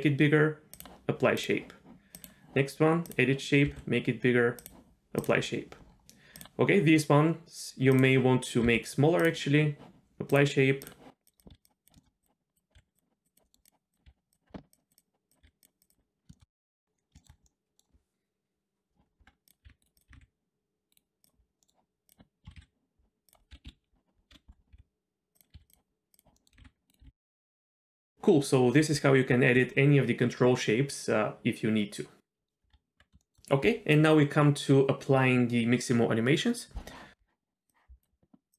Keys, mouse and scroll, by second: 1.4 click, 2.1 click, 3.0 click, 3.7 s, 5.2 click, 5.9 scroll down 1, 6.4 click, 7.9 click, 8.7 s, 10.3 click, 10.8 click, 11.2 click, 11.4 click, 11.5 s, 11.8 click, 11.9 shift+middle drag, 12.1 scroll up 2, 12.2 click, 12.5 click, 12.7 s, 13.3 click, 13.4 middle click, 13.6 click, 13.9 click, 14.0 s, 14.7 click, 14.9 click, 15.3 click, 15.4 s, 15.9 click, 16.3 shift+middle click, 16.6 Tab, 16.6-17.1 scroll down 3, 16.7 z, 17.2 shift+middle click, 17.4-17.8 middle drag, 19.2 Tab, 19.6 r, 20.0 click, 20.1 r, 21.2 click, 21.4 scroll up 1, 21.6 middle click, 22.1 click, 22.4-25.5 typing, 26.1 click, 26.3 middle click, 26.6 r, 27.0 r, 27.4 middle click, 27.5 shift+middle click, 27.6 scroll down 1, 27.7 middle click, 32.7 Tab, 33.2 shift+middle click.